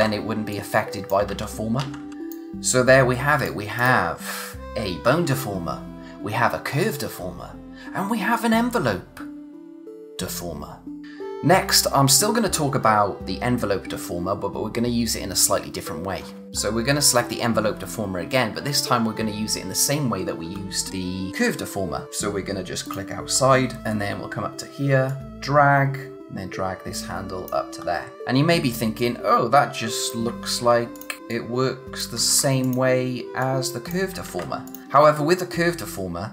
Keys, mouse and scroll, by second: 0.5 click, 1.3 ctrl+z, 2.1 click, 11.0 scroll up 1, 22.0-22.9 scroll up 1, 22.9 click, 23.4-23.8 scroll down 1, 23.8 scroll up 1, 23.9-24.3 scroll down 1, 24.3-25.1 scroll up 1, 25.1 click, 27.8 scroll down 1, 28.1 space, 29.0 click, 30.4 ctrl+z, 31.0 click, 32.3 ctrl+z, 32.6 click, 34.3 ctrl+z, 34.7 click.